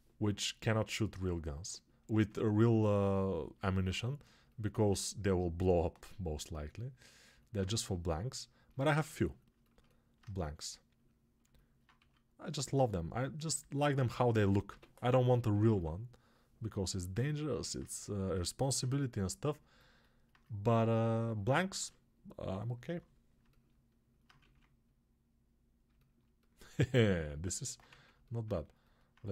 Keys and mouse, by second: 10.0-14.3 ctrl+alt+right drag, 11.9 2, 14.3-24.3 alt+drag, 14.6 g, 15.0 ], 24.3 ctrl+z, 27.8 ctrl+z, 28.7-29.3 right drag.